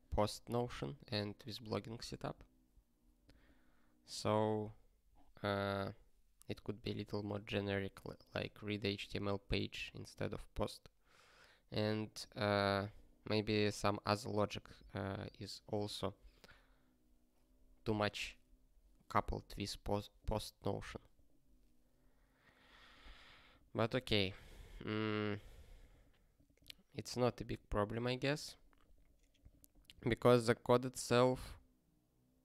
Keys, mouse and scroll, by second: 0.9 click, 1.0 double click, 1.6 double click, 1.8 click, 2.0 double click, 2.2 double click, 13.2 scroll up 3, 23.1-23.4 scroll up 1, 27.2 scroll up 1, 28.1 scroll down 1, 28.9 click.